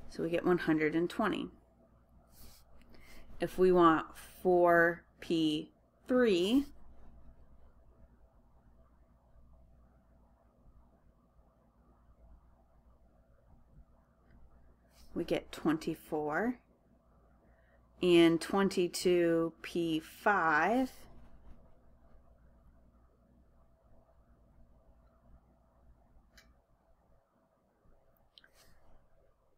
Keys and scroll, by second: 0.1-0.8 typing, 8.5 4, 10.6-11.4 typing, 12.4-14.5 typing, 14.5 Return, 15.5-16.2 typing, 21.9-22.6 typing, 24.6 Left, 26.3 2, 26.9 5, 28.1 Return.